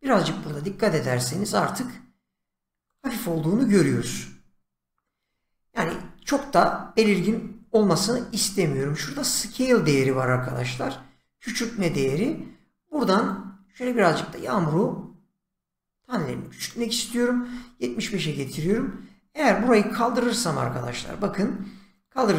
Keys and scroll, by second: 18.6 shift+,.